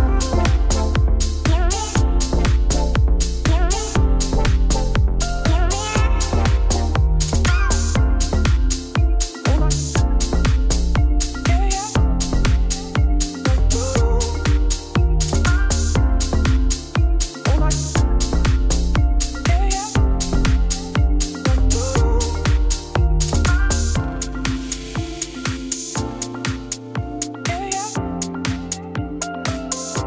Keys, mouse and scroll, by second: 0.3 click, 4.4-4.7 scroll down 3, 4.7-5.8 middle drag, 6.2 click, 8.4 click, 12.3-14.0 drag, 14.7 click, 15.5 click, 16.8 middle click, 17.3 scroll up 6, 17.5 Tab, 17.7 middle click, 17.8 3, 17.9 click, 18.1 ctrl+click, 18.4 i, 20.3 Tab, 20.7 middle click, 21.0 scroll up 3, 21.0 Tab, 21.3 g, 22.2 g, 23.9 click, 24.2 shift+middle click, 25.1 g, 26.7-28.4 middle drag, 28.4 ctrl+r, 29.5 ctrl+r.